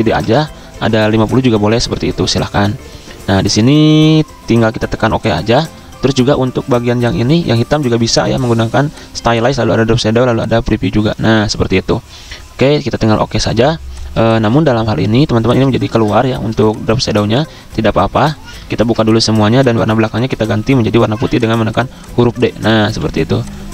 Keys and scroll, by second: 0.0-2.2 typing, 15.9 ctrl+z, 18.8 ctrl+alt+2, 19.9 ctrl+z, 20.5 d, 22.2-23.3 typing.